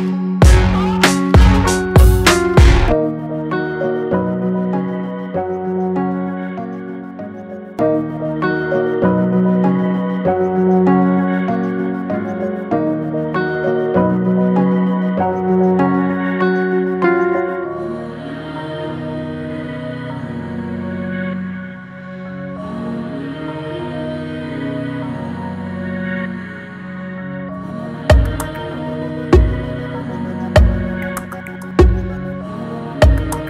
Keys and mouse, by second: 0.7 click, 5.1 click, 5.9 click, 13.0 click, 17.7-31.6 drag.